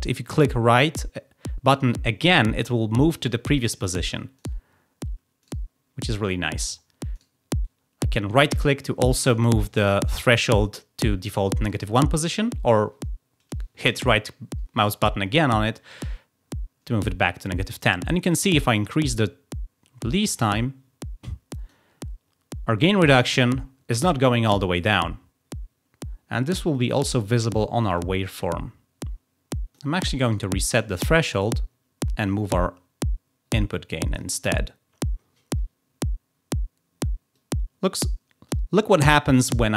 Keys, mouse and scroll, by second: 0.2 right click, 3.8 right click, 4.3 right click, 5.4 right click, 7.1 right click, 12.2 right click, 18.4-21.7 drag, 26.6 click, 26.8 click, 26.9 click, 27.7 click, 27.8 click, 28.8 click, 30.2 right click, 32.2-34.1 drag, 37.3-38.5 drag.